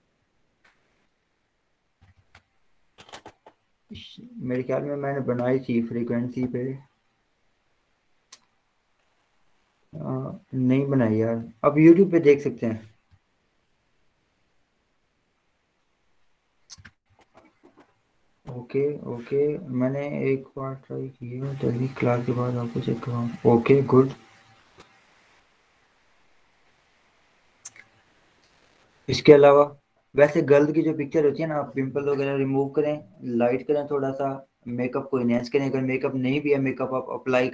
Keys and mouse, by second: 2.3-16.6 drag.